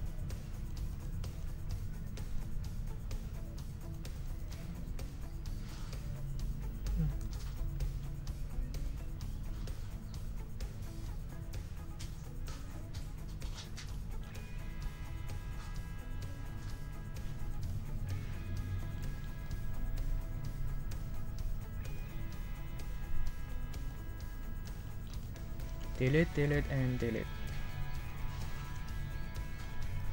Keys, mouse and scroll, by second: 0.3-0.8 drag, 1.3 click, 1.7 click, 2.0-3.8 drag, 3.8-4.6 drag, 4.9 click, 5.7 click, 7.2 ctrl+z, 8.7 ctrl+click, 9.1 ctrl+scroll up 2, 18.6-21.3 drag, 21.9-23.4 drag, 23.5-24.8 drag, 24.9-26.3 drag, 27.6-28.5 drag, 28.8 ctrl+scroll down 2, 29.3 ctrl+click, 30.0 ctrl+click.